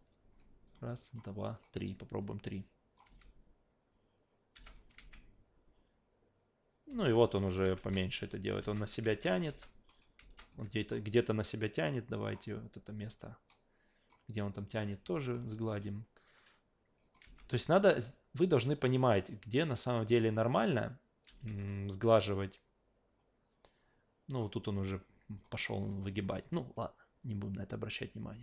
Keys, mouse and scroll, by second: 0.7 click, 1.1 click, 1.5 click, 2.6-2.9 drag, 3.1 alt+v, 4.7 drag, 5.0 alt+v, 6.9 alt+v, 7.1 alt+drag, 7.5 alt+v, 7.8 alt+v, 7.9-8.5 alt+right drag, 8.6 alt+v, 9.0 alt+v, 9.3 alt+middle click, 9.5 alt+v, 10.2 alt+v, 11.1-12.3 drag, 13.5 click, 15.3 click, 16.2 click, 17.0 click, 21.3 alt+v, 22.2-24.4 drag, 25.4 click, 27.2-28.4 drag.